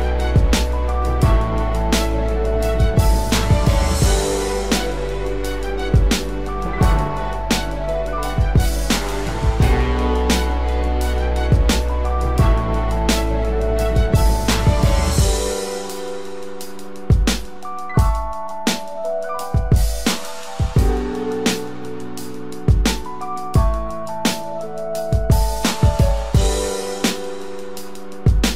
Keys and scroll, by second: 5.9 ctrl+z, 6.7 ctrl+z, 16.2 ctrl+z.